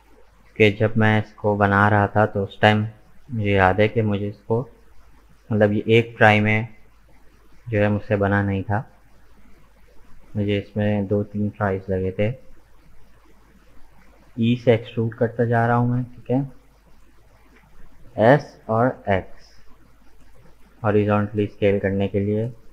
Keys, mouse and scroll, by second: 4.8-7.9 shift+middle drag, 9.4 e, 12.2 e, 17.5 s.